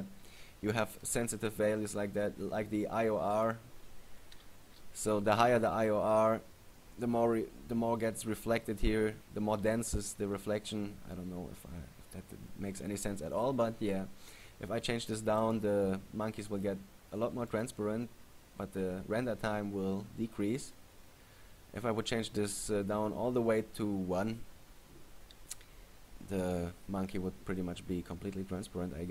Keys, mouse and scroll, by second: 1.2 right click, 3.5 click, 15.5 click, 16.9 click, 18.1 click.